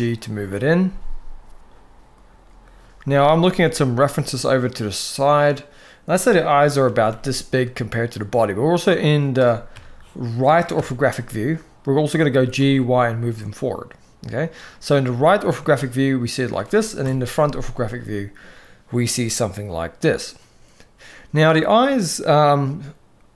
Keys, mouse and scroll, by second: 3.7 s, 6.2 KP_3, 6.6 g, 9.4 KP_3, 10.5 KP_3, 12.0 g, 15.4-16.2 shift+middle drag, 16.7 KP_1.